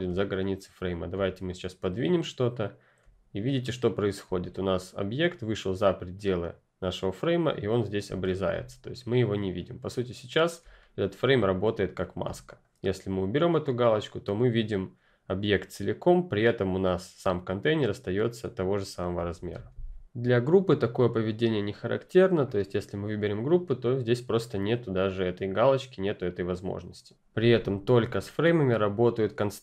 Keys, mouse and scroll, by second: 0.0 ctrl+click, 3.2 ctrl+scroll up 1, 4.2-5.6 scroll up 1, 8.0-8.4 ctrl+scroll up 1, 8.4 ctrl+click, 10.6 ctrl+click, 10.7-11.5 ctrl+scroll up 1, 11.5-12.2 ctrl+scroll down 1, 12.2 scroll down 1, 12.4 click, 17.8 click, 19.3 ctrl+z, 22.4 F10, 22.4 click, 27.0 click.